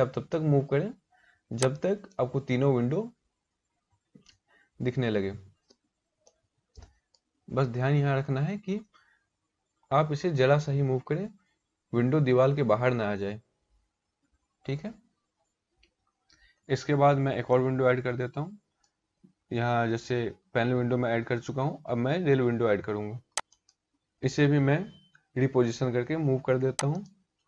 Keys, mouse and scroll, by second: 2.9 scroll up 3, 3.4 scroll down 1, 4.1 scroll down 2, 5.8 shift+middle click, 7.1-7.8 scroll up 1, 12.9 scroll up 2, 13.7 scroll down 1, 15.0 scroll down 3, 17.0 middle click, 23.1 click, 26.5 click.